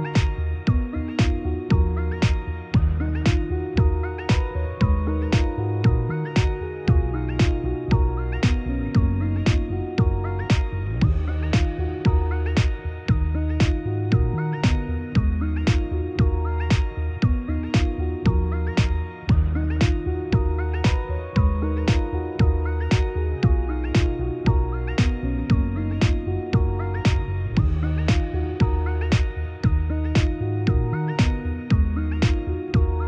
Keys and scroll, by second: 13.6 ctrl+d.